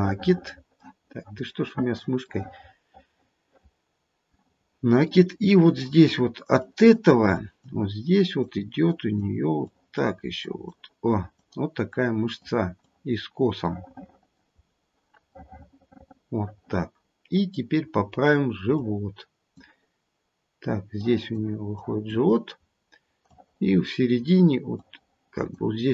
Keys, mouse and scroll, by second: 0.7 middle click, 2.2 middle click, 2.4 middle click, 4.5-5.1 scroll up 1, 5.1 middle click, 5.1 scroll up 1, 6.5 click, 7.4 click, 8.1 click, 8.8 click, 9.6 click, 10.4 click, 11.1 click, 11.9 click, 12.8 click, 13.5 scroll up 1, 14.6-15.5 scroll down 2, 15.5 middle click, 15.5 scroll down 1, 16.1 middle click, 16.9 middle click, 17.0 middle click, 18.7 click, 21.0 click, 21.7 click, 22.6-23.2 scroll up 2, 23.2 click, 24.7 click.